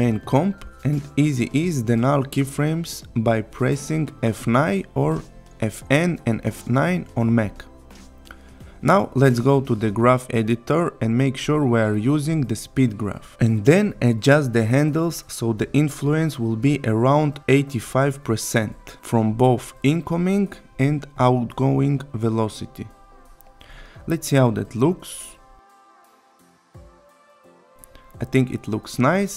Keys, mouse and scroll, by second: 0.8 click, 5.5 F9, 8.9 click, 9.8 right click, 11.0 click, 21.9 click, 23.3-26.0 drag, 26.1 space, 28.4-29.0 click.